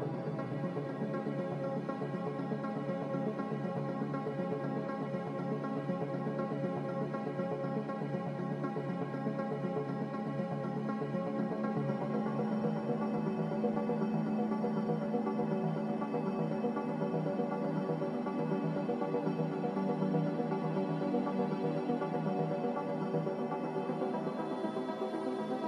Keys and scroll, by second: 16.9 g, 21.2 z.